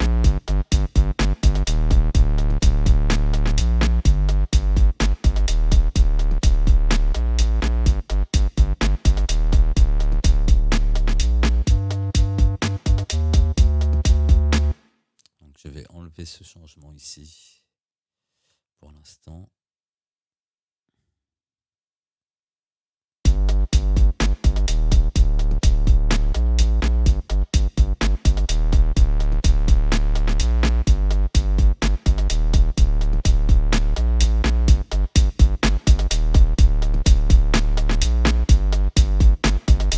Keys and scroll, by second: 14.7 space, 18.4 Delete, 23.3 space.